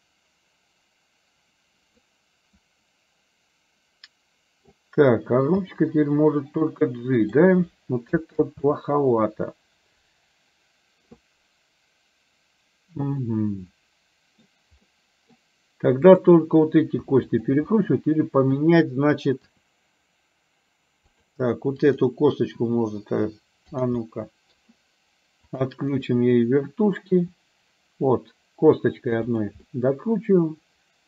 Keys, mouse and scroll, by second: 2.1-4.7 middle drag, 5.8 g, 8.5 ctrl+z, 13.2-14.3 middle drag, 15.0 middle click, 16.1 click, 17.4 shift+click, 17.7 middle click, 19.6 r, 24.1 middle click, 25.6 click, 26.0 click, 26.5 click, 27.2 r, 29.6-31.0 middle drag.